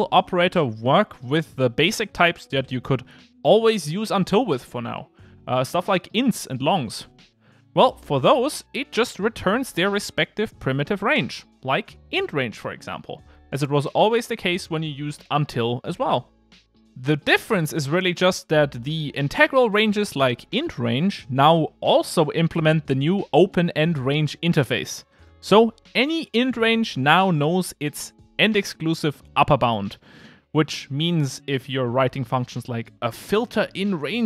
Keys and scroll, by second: 22.7 Return, 26.8 Return, 31.3 super+z.